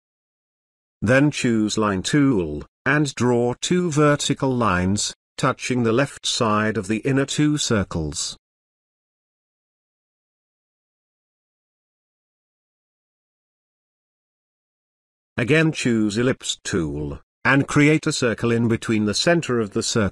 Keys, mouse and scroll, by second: 6.3-8.2 shift+drag, 10.3 space, 10.5-11.8 ctrl+drag, 12.8-13.4 ctrl+click.